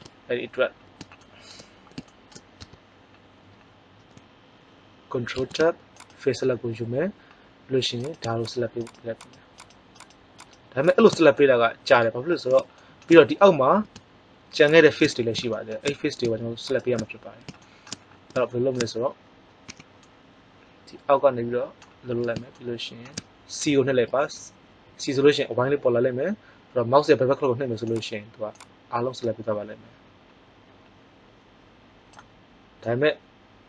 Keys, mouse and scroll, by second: 0.7-1.7 middle drag, 2.5 Tab, 5.3 ctrl+Tab, 7.9 click, 11.3 middle click, 14.7-15.7 middle drag, 19.6 a, 23.9 c.